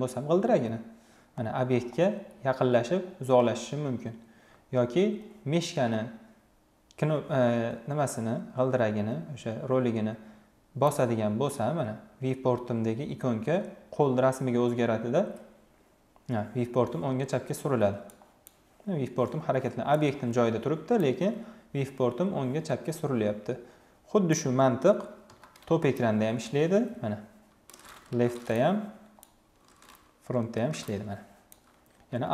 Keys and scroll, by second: 24.9 t, 27.8 l, 30.1 f, 32.2 alt+w.